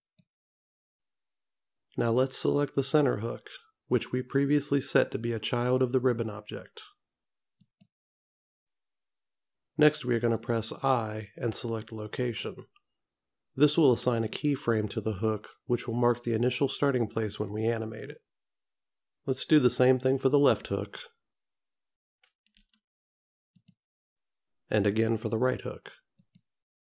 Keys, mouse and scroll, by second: 7.7 click, 8.6-9.3 scroll down 4, 10.3 click, 14.1 i, 20.9 click, 22.7 i, 26.2 click.